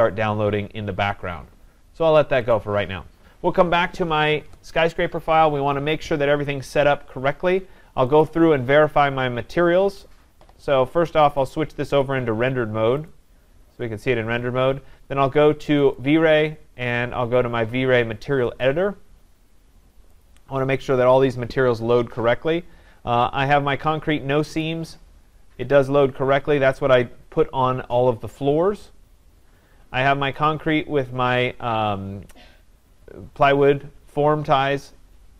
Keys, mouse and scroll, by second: 2.5 click, 8.2 click, 11.4 click, 12.0 click, 13.1 click, 15.9 click, 18.6 click, 20.2 click, 23.8-29.8 drag, 30.5-35.3 drag.